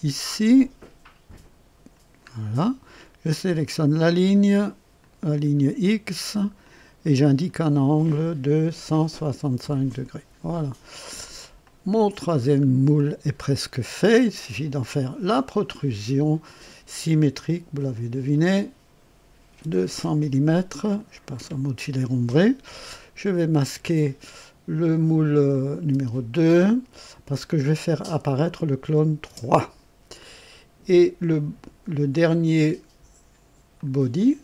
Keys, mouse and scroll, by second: 2.3-2.6 scroll up 1, 3.7 click, 4.9 click, 6.6 click, 8.8 KP_1, 9.1 KP_6, 9.3 KP_5, 9.6 Return, 11.6 click, 12.4 scroll down 1, 12.9-14.3 drag, 15.2 click, 16.8 click, 18.3 click, 19.6 KP_0, 19.9 Return, 22.4 click, 25.5 click, 27.0 space, 28.8 click, 29.2 space, 30.1 click, 33.7 click.